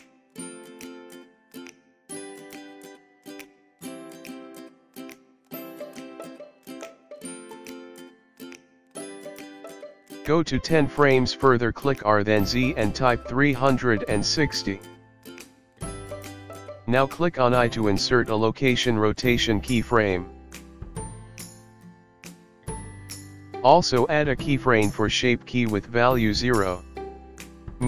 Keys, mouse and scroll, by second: 2.8 i, 8.2 click, 12.8 r, 20.9 i, 26.3 i.